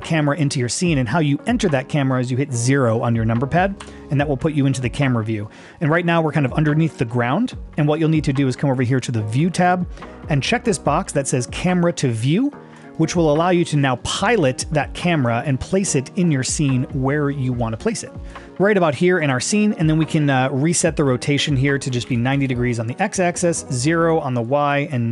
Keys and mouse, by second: 3.8 KP_0, 9.4 click, 12.8 click, 17.4 middle click, 18.4 middle click, 21.7 click, 23.8 click.